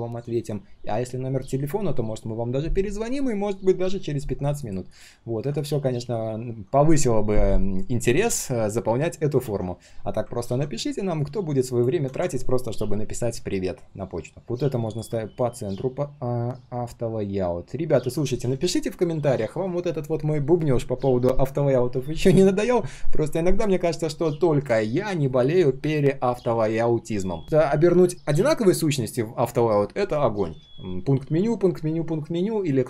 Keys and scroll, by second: 9.4 ctrl+z, 15.2 alt+h, 16.5 ctrl+z.